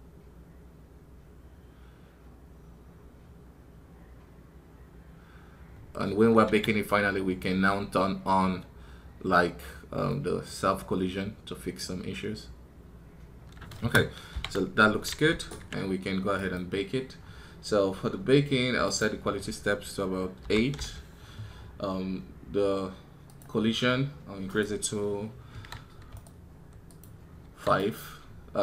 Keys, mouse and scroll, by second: 16.2 right click.